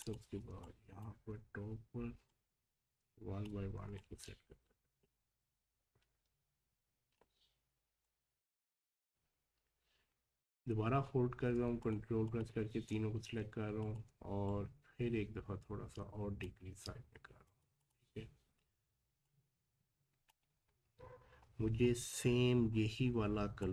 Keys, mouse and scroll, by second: 0.3 scroll up 1, 0.5 space, 0.6 click, 1.0 space, 1.3 scroll up 1, 2.3-11.8 drag, 14.5-17.4 alt+shift+drag, 18.2-19.2 scroll up 1, 19.2-20.6 drag, 20.6-21.5 scroll down 1, 23.6 click.